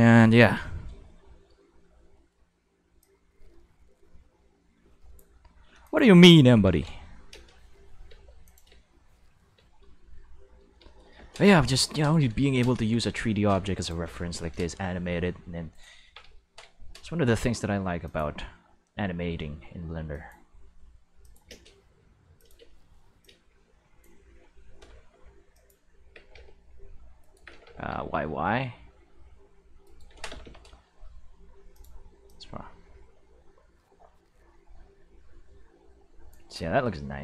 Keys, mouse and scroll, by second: 3.0-5.2 drag, 5.8 drag, 6.6 ctrl+s, 7.3 space, 8.0 space, 8.4 click, 8.7 space, 9.5 space, 10.9-11.9 shift+middle drag, 11.9 right click, 13.7 right click, 15.0-16.7 typing, 15.7 right click, 18.0 click, 18.3 g, 20.1 click, 21.2 click, 21.5 space, 22.2 space, 22.4 click, 22.6 space, 23.0 space, 23.2-24.0 drag, 24.4 r, 24.8 y, 25.0 y, 25.5 click, 26.0 g, 26.2 x, 27.2 right click, 27.3-28.0 typing, 29.8 right click, 30.1 g, 30.3 y, 30.4 y, 31.7 click, 32.2-36.3 drag, 36.6-37.2 middle drag.